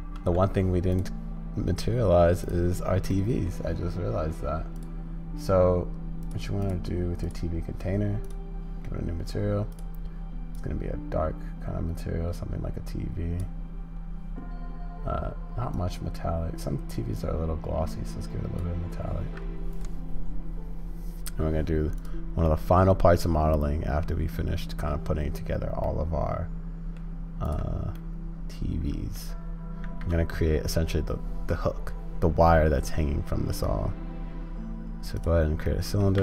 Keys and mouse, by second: 0.0 ctrl+space, 2.4 click, 3.2 middle click, 4.8-8.4 drag, 22.5-24.1 middle drag, 25.9-27.0 middle drag, 28.0-29.2 middle drag, 29.8 shift+a, 35.7 middle click.